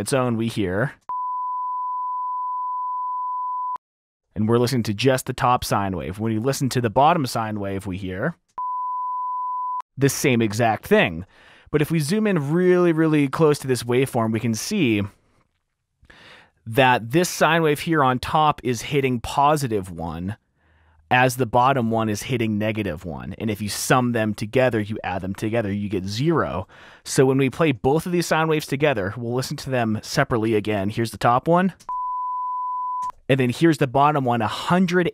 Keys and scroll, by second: 0.3 Return, 1.1 space, 3.8 space, 6.6 s, 8.9 space, 10.0 space, 13.0 t, 14.6 t, 26.9 r, 27.0 r, 27.3 r, 28.8 typing, 30.8 s, 31.4 s, 32.2 space, 33.2 space, 33.5 s.